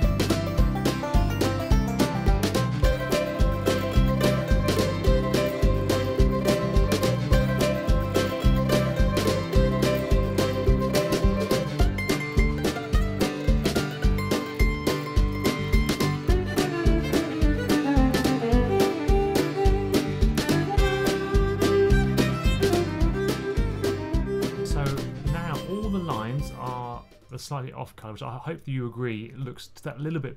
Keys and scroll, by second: 0.5-6.0 typing, 6.6 super+z, 6.9 super+z, 7.1-8.3 typing, 9.4-12.4 typing, 17.6-24.4 typing, 19.7 super+z.